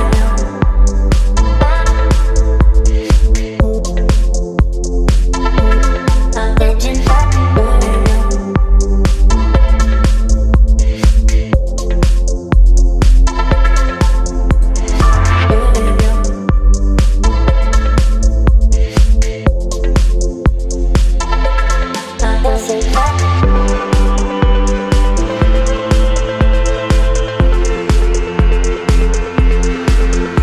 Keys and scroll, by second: 4.1 Return, 15.7 Up, 17.9 Up, 18.0 Up, 18.1 Up, 18.3 Up, 21.7 space.